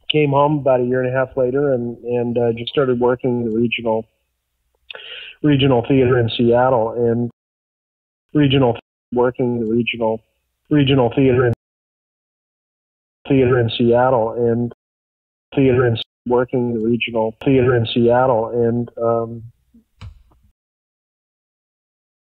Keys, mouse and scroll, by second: 1.7 click, 2.3 click, 5.8-7.2 drag, 7.2 space, 7.8 ctrl+shift+Delete, 8.2 space, 8.7 space, 8.9 click, 9.0 space, 11.4 space, 12.3 click, 13.1 space, 13.5-14.7 drag, 14.6 space, 15.2 ctrl+shift+Delete, 15.4 space, 15.9 space, 16.1 click, 16.2 space, 18.3 click, 19.4 click, 20.4 space, 20.8 click, 21.5 click.